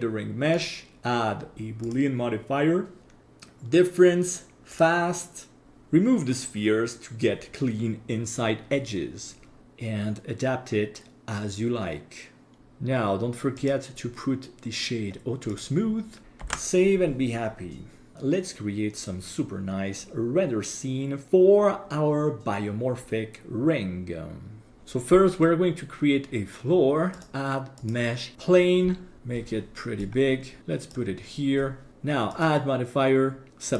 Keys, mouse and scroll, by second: 0.5-3.2 drag, 5.6 click, 12.6 ctrl+s, 13.6-16.2 drag, 16.6 ctrl+s, 27.2-28.3 drag, 30.0-30.9 drag, 32.3-33.7 drag.